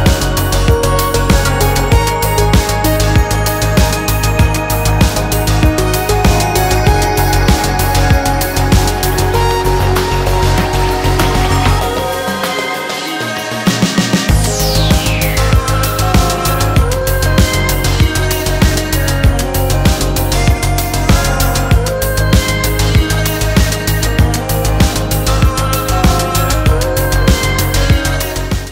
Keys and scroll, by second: 4.5 super+-, 11.6 Return, 12.8 Return, 20.8-24.6 typing, 27.5 Return.